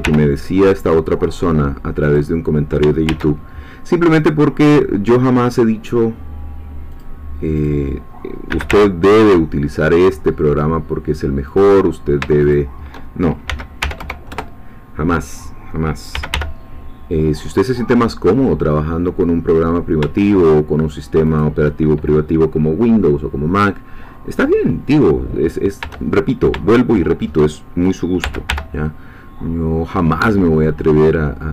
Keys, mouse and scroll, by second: 0.0 y, 2.0 click, 3.1 ctrl+r, 4.2 click, 6.9 click, 8.5 g, 8.7 y, 11.5 click, 12.4 shift+click, 13.5 s, 13.8 y, 14.0 0, 14.3 Return, 16.1 g, 16.3 y, 21.3 shift+click, 26.3 shift+middle click, 26.8 shift+middle click, 28.2 e, 28.5 y.